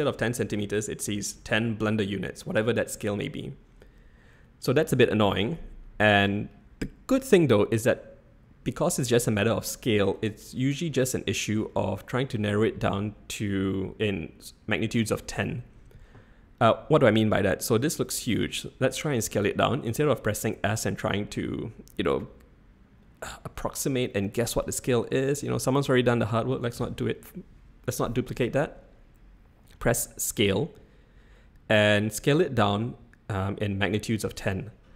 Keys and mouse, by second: 20.5 s, 23.0 click.